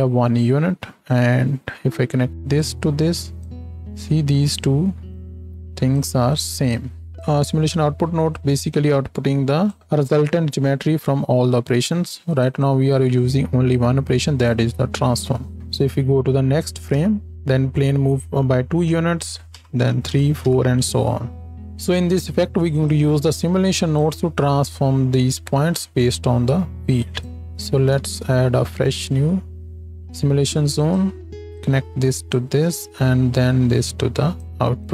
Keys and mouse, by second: 12.5 click, 16.9 Right, 19.6 Right, 20.1 Right, 20.4 Right, 27.4 x, 27.9 shift+a, 31.0 click.